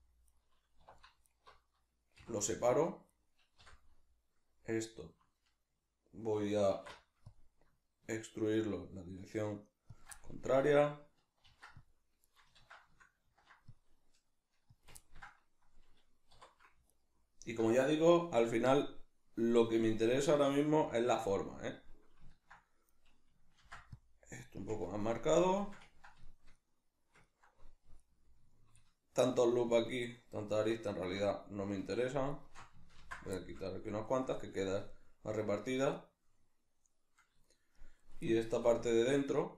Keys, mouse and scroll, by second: 0.4 right click, 0.8 2, 1.2 alt+right click, 2.2 v, 2.5 right click, 3.1 right click, 3.6 l, 10.0 shift+click, 10.1-12.3 middle drag, 11.4 ctrl+r, 12.3 right click, 12.6 ctrl+z, 14.8 click, 15.0-16.9 ctrl+middle drag, 16.3 3, 16.9 alt+right click, 20.2 g, 21.2 click, 21.4-24.7 middle drag, 23.6 ctrl+r, 24.7 click, 24.8-28.0 ctrl+middle drag, 28.0 alt+right click, 29.2 alt+shift+right click, 29.8 alt+shift+right click, 30.0 alt+shift+right click, 31.3 alt+right click, 32.0 alt+shift+right click, 32.3 alt+shift+right click, 33.0 ctrl+x, 33.4-39.3 shift+middle drag, 38.5 3, 39.3 right click.